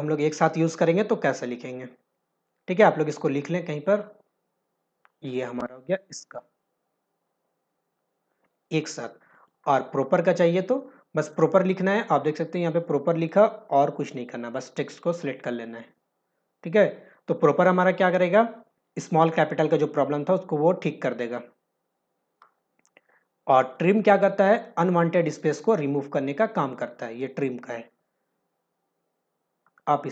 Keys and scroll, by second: 24.2 ctrl+alt+v.